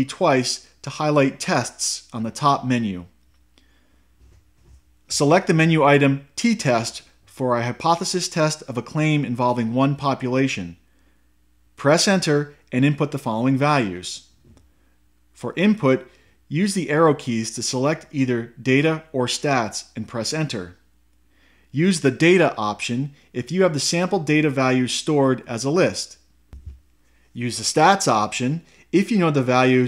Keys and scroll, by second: 0.1 Right, 1.1 Right, 6.9 Down, 12.1 Return, 19.1 Right, 20.9 Left, 26.4 Right, 27.7 Return.